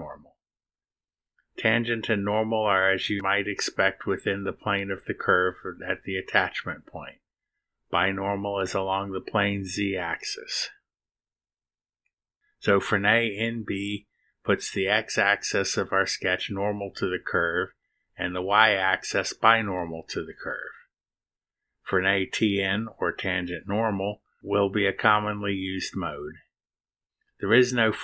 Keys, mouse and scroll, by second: 20.1-21.5 drag, 21.9 click, 22.8 click, 25.4 click, 26.8 click.